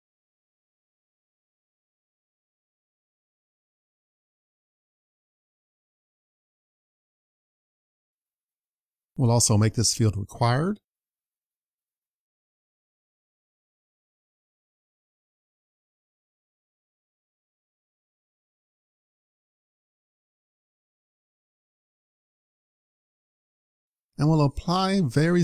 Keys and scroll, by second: 3.2 super+s, 13.2 super+c, 15.2 super+c, 15.5 super+v, 20.0 super+s.